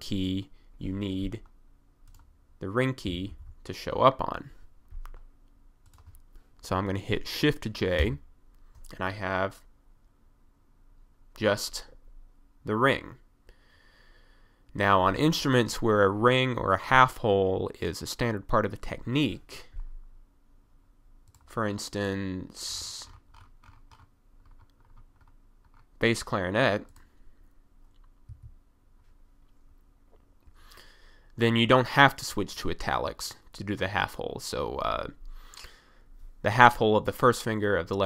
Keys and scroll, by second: 3.1 f, 3.2 d, 3.3 s, 5.2 typing, 8.0 j, 28.3 1.